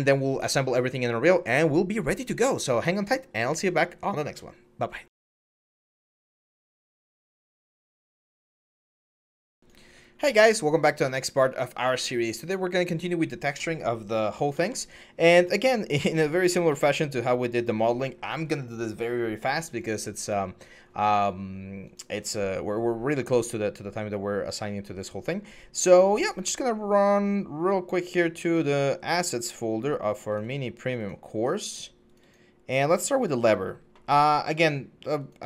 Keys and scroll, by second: 14.2 alt+Tab, 16.1 alt+Tab.